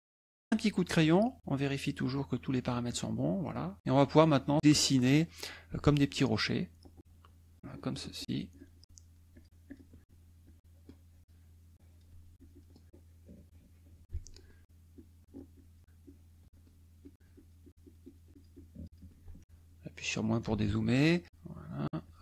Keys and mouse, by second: 0.3 click, 3.8 KP_Add, 4.4 click, 6.4-7.6 shift+drag, 9.3 shift+click, 9.6 shift+click, 10.4 shift+click, 11.7 shift+click, 12.3 shift+click, 12.8-14.3 shift+drag, 14.6 shift+click, 14.9 shift+click, 15.5 shift+click, 16.0 shift+click, 17.0 shift+click, 17.3-19.1 shift+drag, 19.4 KP_Subtract, 19.6 middle click, 21.2-22.2 shift+drag.